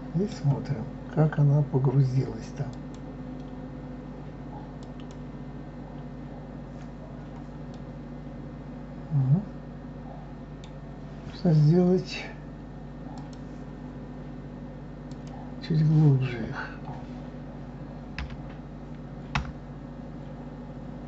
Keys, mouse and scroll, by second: 2.8-5.1 drag, 7.2-7.7 scroll up 1, 7.7-10.7 middle drag, 13.1-15.2 drag, 19.3 l.